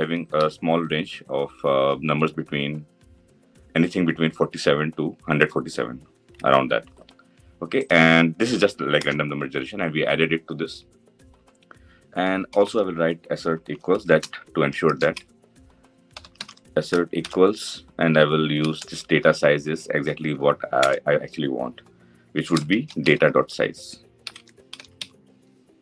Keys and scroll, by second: 20.5 Return, 25.5 Return.